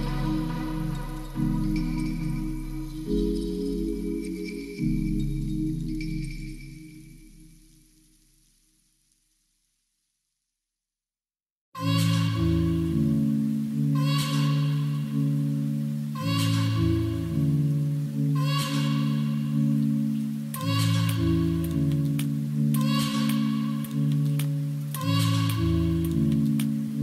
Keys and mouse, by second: 0.9-1.7 drag, 2.3 click, 3.2 click, 4.6 shift+middle drag, 5.1 ctrl+s, 9.0-9.4 shift+middle drag, 10.2 shift+middle click, 11.7 shift+a, 13.7 s, 16.9 middle click, 17.3 middle click, 17.7 g, 17.9 z, 18.8 s, 19.9 middle click, 20.2 s, 20.3 z, 22.5 click, 22.8-23.5 middle drag, 23.9 s, 25.0 shift+click, 25.4 middle drag, 25.9 s.